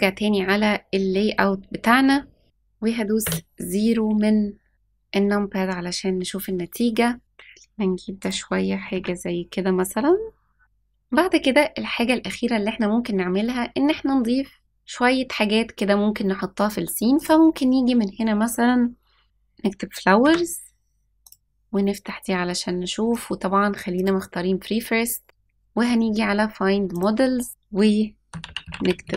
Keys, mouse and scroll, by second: 0.0 click, 1.7-2.1 scroll down 2, 3.1 KP_0, 4.7-5.2 scroll up 4, 7.2 g, 8.7 r, 17.1-20.2 drag, 21.1 click, 23.0 click, 26.8 click, 27.5-29.1 drag.